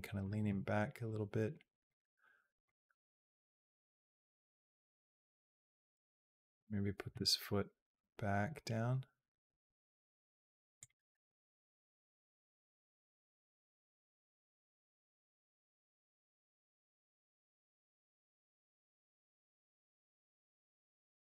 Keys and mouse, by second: 0.3 g, 2.5-5.8 drag, 6.3 click, 7.1 g, 13.4-15.0 drag, 15.6 g, 17.4-18.7 drag, 19.1-20.5 drag.